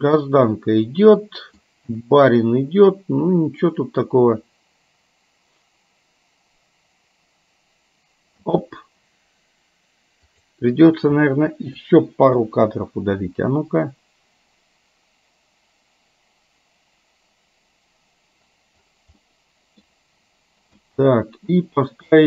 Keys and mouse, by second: 0.7-1.7 middle drag, 8.4 space, 10.6 click, 10.9 click, 12.4 Delete, 13.3 space, 19.4 middle click, 20.8 space.